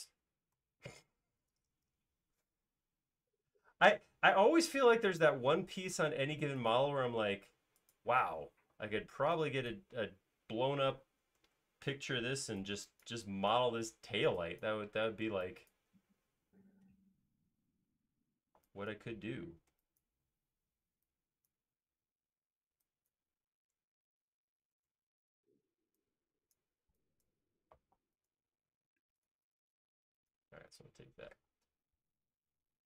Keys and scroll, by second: 0.6 alt+s, 5.9 m, 8.5 space, 8.9 e, 11.4 super+z, 17.6 space, 18.0 e, 24.8 super+z, 24.9 super+z, 27.7 alt+space, 31.6 m.